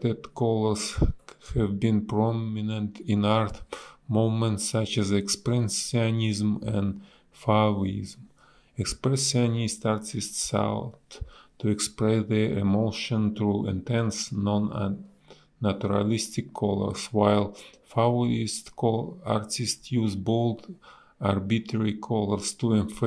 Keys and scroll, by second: 0.8 ctrl+z, 1.7 ctrl+z, 5.4 ctrl+z, 10.3 ctrl+z, 14.4 a, 15.8 Delete, 16.6 a, 19.1 space, 22.6 space.